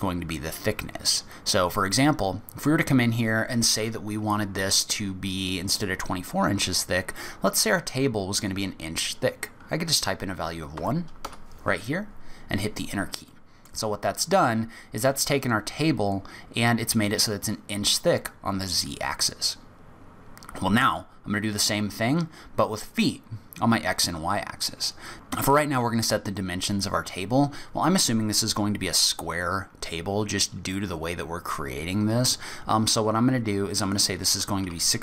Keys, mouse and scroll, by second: 1.7 click, 13.3 middle click, 13.8 scroll up 2, 26.7 click.